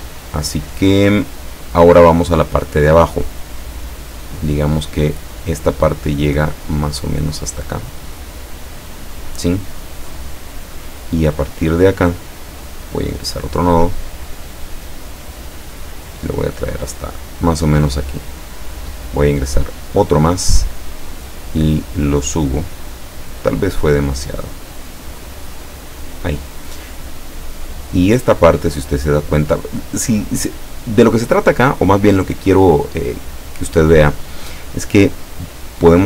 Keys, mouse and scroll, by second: 7.9-11.3 drag, 12.7 click, 13.7-18.6 drag, 19.8 click, 20.4-24.0 drag, 24.8-26.3 drag.